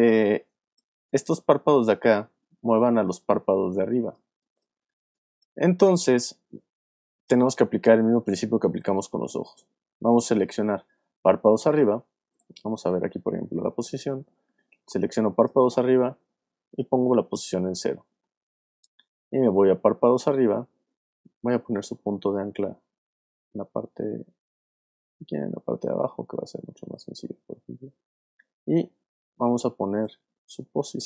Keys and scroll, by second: 0.0 space, 3.7 alt+space, 4.6 space, 12.3 p, 21.6 y, 30.9 p.